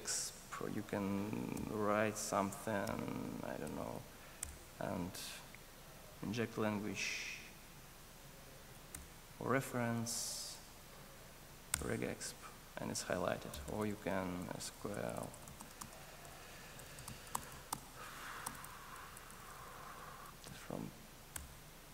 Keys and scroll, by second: 4.4 alt+Return, 21.3 Return.